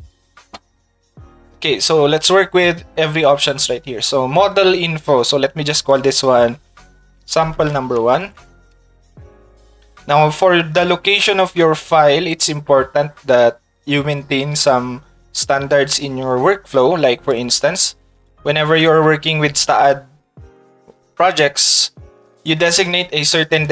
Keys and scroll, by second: 7.4 shift+s, 8.2 e, 9.2 space.